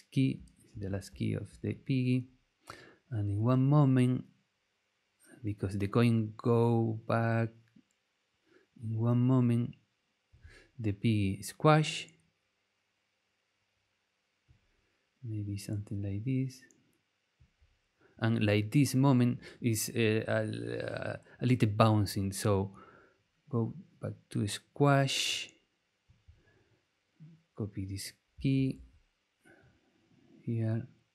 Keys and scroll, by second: 0.7 super+c, 1.1 super+v, 28.5 super+c.